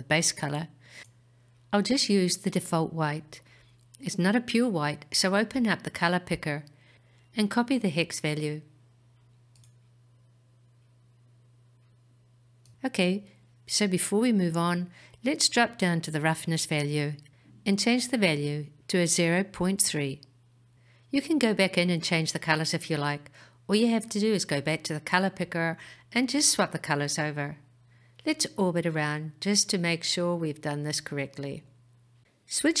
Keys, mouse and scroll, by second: 1.9 click, 10.7-13.6 scroll down 8, 13.6-14.5 scroll down 1, 17.4-21.3 drag, 23.0-25.1 scroll up 4, 25.1 click, 29.9-32.8 middle drag.